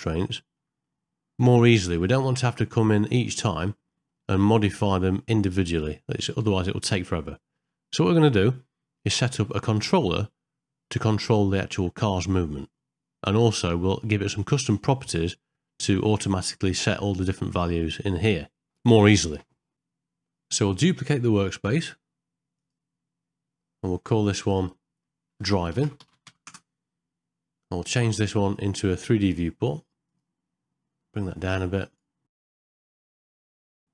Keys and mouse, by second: 0.4 ctrl+middle click, 0.9 middle click, 3.7 middle click, 5.8 click, 9.7 shift+middle click, 10.4 middle click, 16.4 middle click, 18.0 middle click, 21.5-22.8 right drag, 24.4 click, 24.6-26.4 drag, 28.6-30.2 drag, 31.7 click, 32.8 click.